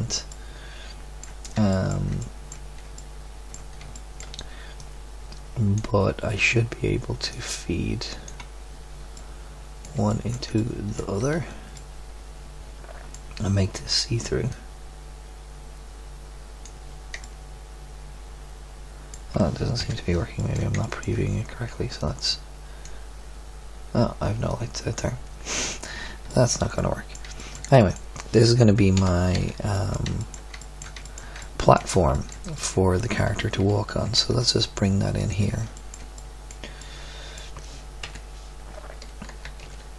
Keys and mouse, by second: 4.7-5.7 drag, 6.9 middle click, 7.3-9.1 drag, 9.1-10.7 middle drag, 11.3 Tab, 19.8 KP_7, 24.4-26.7 drag, 28.9 KP_7, 29.3 z, 34.0 g, 35.2-35.7 middle drag, 38.0 KP_1, 39.4 g.